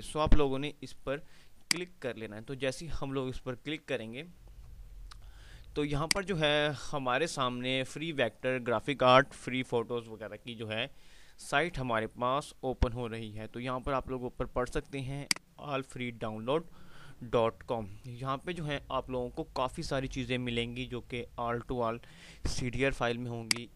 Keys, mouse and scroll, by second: 1.3 ctrl+Num_Lock, 1.3 click, 6.2 click, 15.3-18.0 drag, 18.0 scroll down 1, 23.6-23.7 drag.